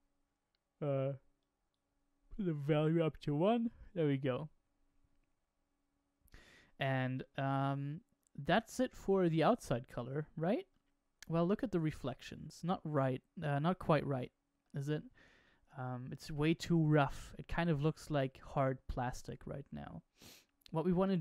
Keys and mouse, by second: 7.1-8.4 middle drag, 9.2-10.0 middle drag, 10.6-11.2 middle drag, 12.9-15.0 shift+middle drag.